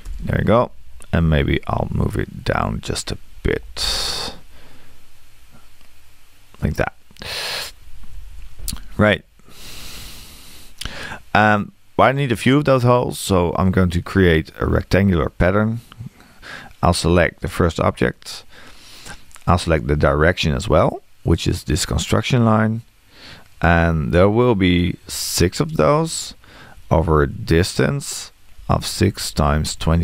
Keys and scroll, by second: 0.0 Return, 3.6 m, 8.3 Return, 25.8 BackSpace.